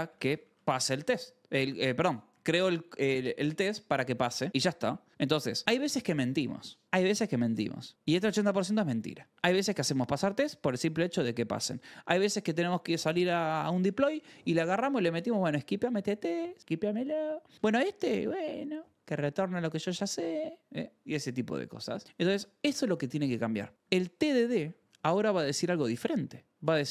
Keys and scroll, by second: 0.0-1.5 typing, 2.2 Left, 2.8 Left, 3.2 Right, 3.7 Right, 4.5 ctrl+s, 5.4 k, 9.6-10.6 typing, 11.2 Escape, 13.1 ctrl+c, 22.1 o, 22.3 Return, 24.3-25.7 typing.